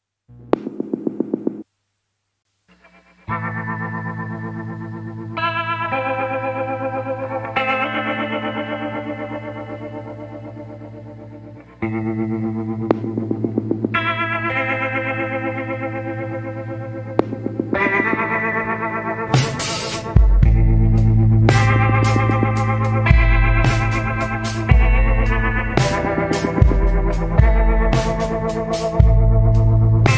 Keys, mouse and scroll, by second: 0.0 scroll up 1, 1.1 scroll down 1, 4.8 scroll down 1, 6.0 scroll up 1, 10.3 scroll down 1, 10.9 scroll up 1, 12.8 scroll down 1, 15.2 scroll down 1, 15.9 scroll up 1.